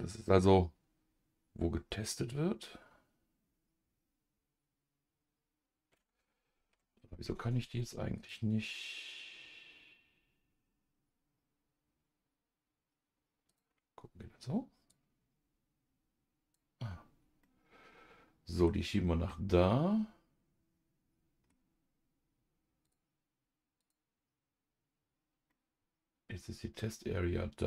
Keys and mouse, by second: 6.6 ctrl+z, 8.1-13.7 drag, 14.9-16.8 drag, 17.4-18.7 middle drag, 19.3-21.5 middle drag, 22.8 click, 23.8 click, 25.5-27.6 middle drag.